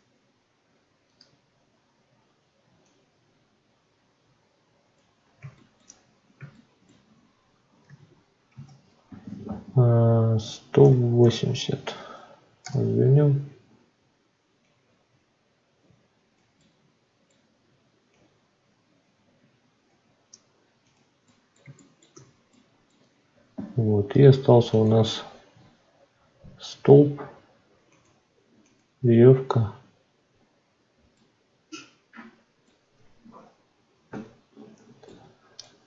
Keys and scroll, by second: 12.6 Return, 34.0 F9.